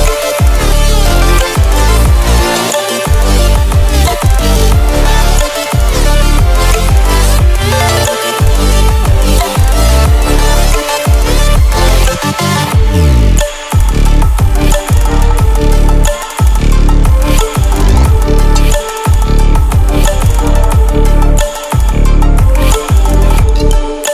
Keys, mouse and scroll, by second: 5.5-6.5 alt+click, 11.0-11.8 ctrl+alt+scroll down 2, 12.4-12.8 ctrl+alt+scroll up 1, 12.8-13.3 ctrl+alt+scroll down 1, 13.3 ctrl+alt+scroll up 1, 15.7 scroll down 1, 16.3-17.6 scroll up 4, 17.6 ctrl+alt+scroll up 1, 19.1-20.9 drag.